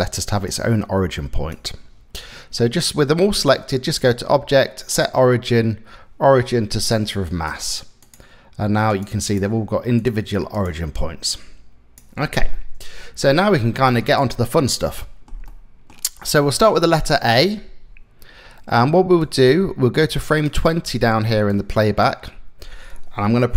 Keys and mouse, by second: 0.2 click, 3.5-7.1 drag, 8.5 click, 8.8 click, 9.6-11.6 drag, 12.2 middle click, 13.6 middle click, 14.6 shift+middle click, 15.1 middle click, 18.8-20.1 drag, 20.1-21.2 middle drag, 21.2 click, 21.8-22.9 middle drag.